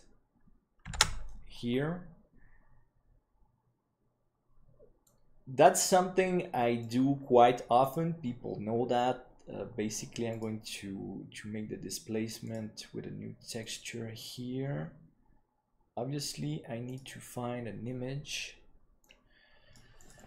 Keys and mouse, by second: 0.6 Tab, 1.2 ctrl+s, 5.0 click, 8.0-11.0 drag, 12.5-13.3 drag, 13.6 click, 16.9 click.